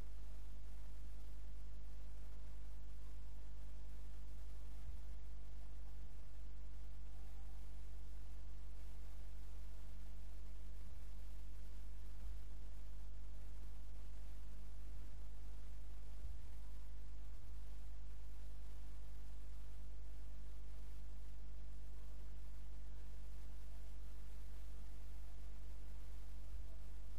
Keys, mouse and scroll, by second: 3.5 click, 4.9 g, 10.9 g, 15.0 click, 16.3 g, 20.1 middle click, 24.3 click, 26.6 g.